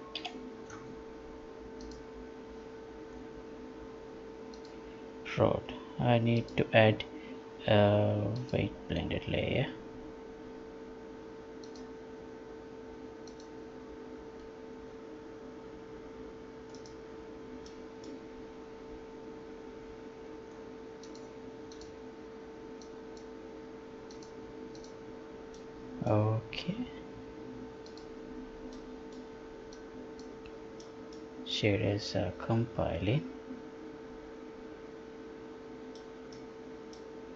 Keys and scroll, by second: 0.2 F11.